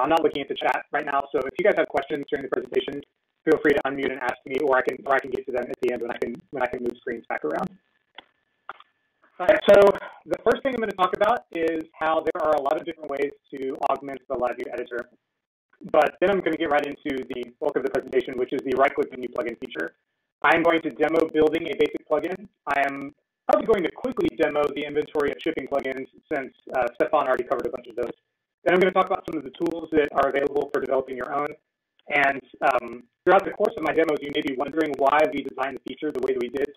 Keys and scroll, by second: 29.9 Return, 29.9 typing.